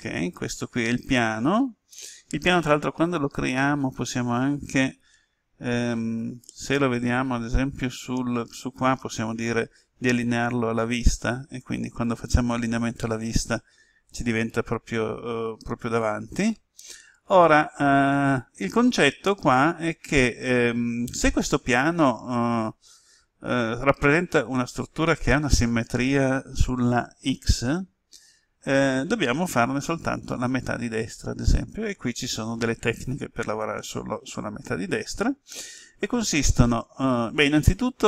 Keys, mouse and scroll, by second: 6.0 KP_1, 10.4 click, 15.2-16.1 scroll up 1.